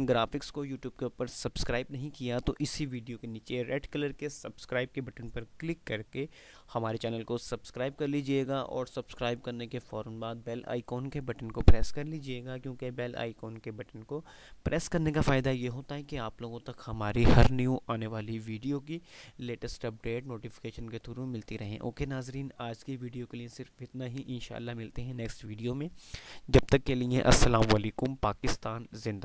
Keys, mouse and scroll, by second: 28.9 ctrl+Num_Lock.